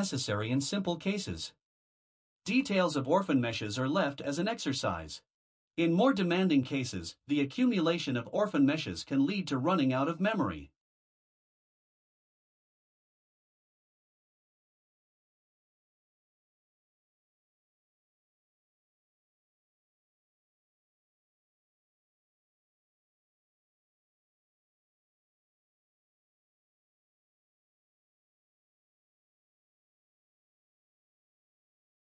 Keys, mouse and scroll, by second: 1.2 ctrl+v, 14.6 click, 16.9 Delete, 22.9 click.